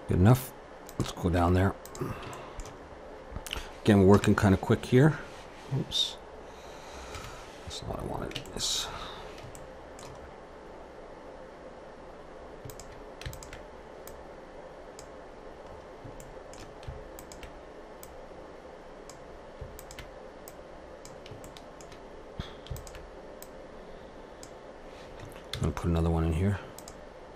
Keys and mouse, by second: 0.9-2.6 drag, 1.3 Tab, 4.1 Up, 7.2 KP_1, 8.5-12.7 middle drag, 12.7-15.7 drag, 15.7-17.1 middle drag, 17.1-21.4 drag, 21.4 middle click, 21.5 click, 21.5 right click, 22.2 middle click, 22.8-25.3 drag, 22.8 right click, 25.4 ctrl+r.